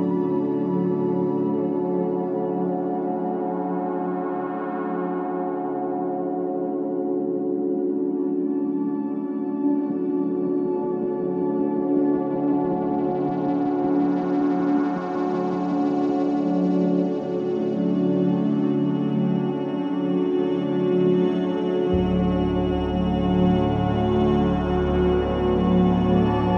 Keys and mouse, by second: 0.0-3.4 drag, 4.0 alt+click, 5.4-14.5 drag, 14.5 Tab, 15.1 Tab, 16.7 g, 17.1 z, 18.3 click, 20.3 s, 21.1 click, 23.2-23.9 typing, 23.9 click.